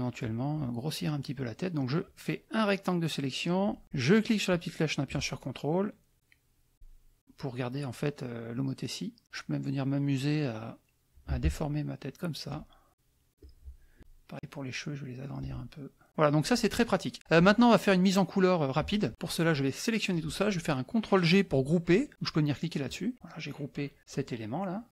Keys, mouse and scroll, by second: 1.9-3.6 drag, 4.5-9.2 drag, 11.2-12.6 shift+drag, 12.9 click, 13.4 click, 14.0-15.5 ctrl+drag, 16.1 click, 19.1-20.3 drag, 22.9 click, 24.0 click, 24.7 click.